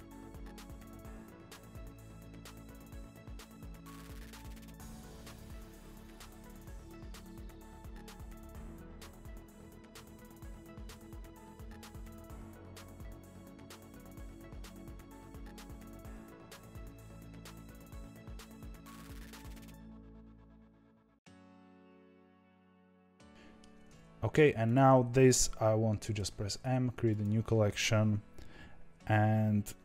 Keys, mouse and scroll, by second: 0.0 g, 0.4 alt+d, 0.7 r, 1.1 alt+d, 1.3 r, 2.0-2.7 middle drag, 2.7-5.3 typing, 3.2 click, 4.0 click, 4.1 middle click, 4.5 click, 5.0 click, 5.1 middle click, 6.0 middle click, 6.1 click, 6.4 g, 6.9 middle click, 7.2 g, 13.1 click, 13.2 Tab, 13.5 Tab, 13.7 middle click, 14.3-16.8 typing, 14.7 click, 15.2 click, 15.3 middle click, 16.0 click, 16.1 middle click, 16.6 click, 16.6 middle click, 17.1-18.0 middle drag, 18.0-22.7 typing, 18.4 alt+d, 19.2 alt+d, 19.8 alt+d, 20.5 middle click, 21.3 click, 21.3 middle click, 21.9 middle click, 22.3 click, 23.0-24.6 middle drag, 24.6 click, 26.1 m.